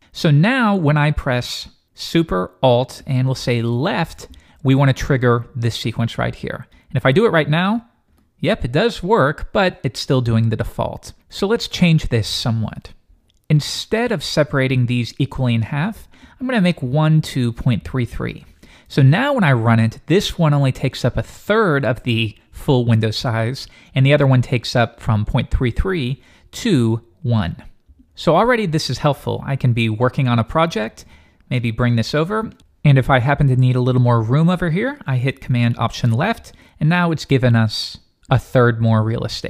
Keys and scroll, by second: 8.1 alt+super+Left.